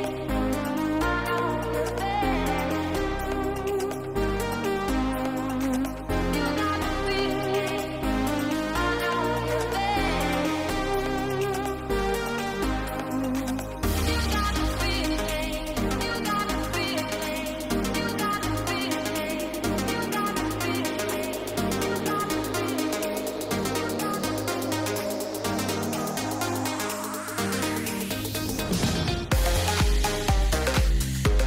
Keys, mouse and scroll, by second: 1.3 click, 1.6 ctrl+a, 2.1 ctrl+a, 2.5 ctrl+a, 3.5 click, 3.9 click, 6.7 shift+middle click, 7.3 shift+middle click, 11.3 shift+middle click, 12.0 click, 12.6 ctrl+z, 12.9 ctrl+z, 13.0 ctrl+z, 13.2 ctrl+z, 13.3 ctrl+z, 13.6 ctrl+z, 13.8 ctrl+z, 14.0 ctrl+z, 15.2 ctrl+z, 17.9 click, 18.3 click, 18.8 click, 19.8 ctrl+a, 20.5 click, 21.1 ctrl+a, 21.4 ctrl+a, 21.7 ctrl+a, 22.0 ctrl+a, 23.6 middle click, 25.9 ctrl+z, 26.0 ctrl+z, 26.3 ctrl+z, 26.5 ctrl+z, 26.9 ctrl+z, 28.0 click, 29.8 click.